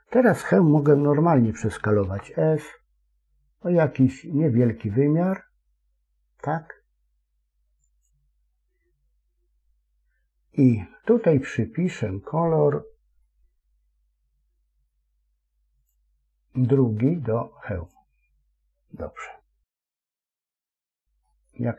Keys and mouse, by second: 1.9 s, 15.7 click, 19.7 Tab, 21.1-21.7 middle drag.